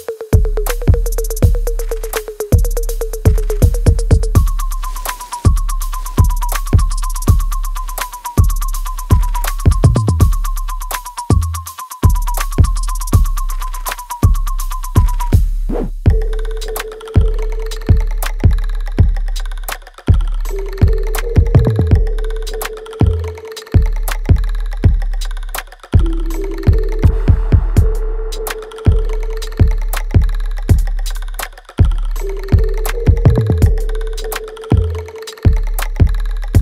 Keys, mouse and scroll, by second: 0.4-2.4 alt+drag, 2.4 alt+right click, 2.9 alt+click, 3.3 alt+middle click, 3.9 alt+middle click, 5.0-8.6 drag, 8.6 alt+click, 9.2-10.7 alt+middle drag, 10.7-19.8 alt+drag, 19.8 alt+right click, 20.3-23.9 alt+drag, 23.9 alt+click, 24.7 alt+middle click, 25.1-26.5 alt+right drag, 26.5-29.9 drag, 29.9 alt+right click, 30.4-32.5 alt+drag, 32.5 alt+middle click, 33.3 alt+click, 33.3 alt+click, 34.1 alt+right click, 35.5 click, 35.5 click, 36.5 alt+middle click.